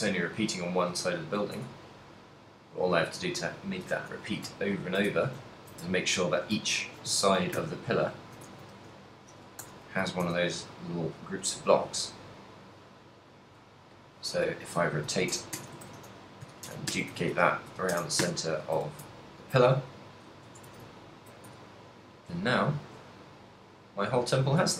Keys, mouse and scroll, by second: 0.0 middle click, 1.1 shift+middle click, 1.3 shift+middle click, 1.7 Tab, 2.0 middle click, 3.0 z, 3.8 KP_7, 4.7 ctrl+middle click, 5.1 shift+middle click, 5.7 ctrl+middle click, 6.1 shift+middle click, 6.8 ctrl+middle click, 7.3 shift+middle click, 8.0 ctrl+middle click, 8.8 shift+d, 9.1 right click, 9.7 r, 12.0 right click, 12.9 click, 14.7 r, 16.0 shift+d, 17.3 shift+d, 18.9 z, 19.4 ctrl+middle click, 19.9 middle click, 20.7 Tab, 20.9 a, 21.0 ctrl+middle click, 21.6 a, 21.8 middle click, 22.6 shift+middle click, 23.5 middle click.